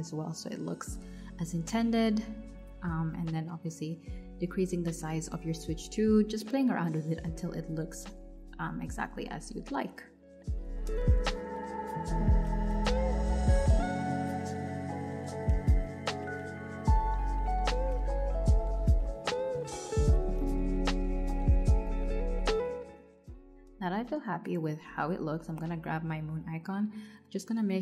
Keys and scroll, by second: 12.9 alt+Left, 27.5 super+z.